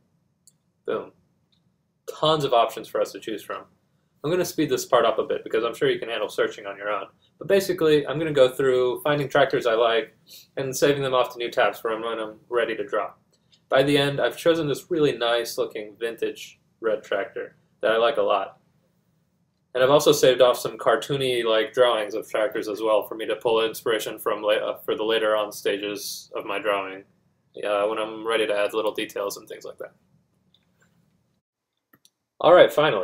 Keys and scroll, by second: 27.9-28.7 typing.